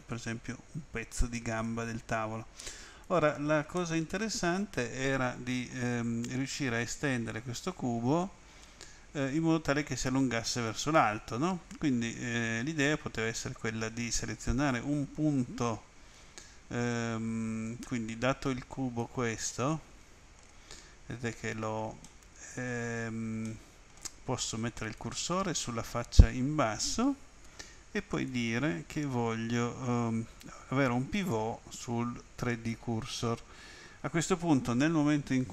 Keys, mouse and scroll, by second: 1.6 click, 3.7 middle click, 17.6 click, 19.4 middle click, 22.0 middle click, 23.4 middle click, 24.8 click, 28.1 click, 32.4 click.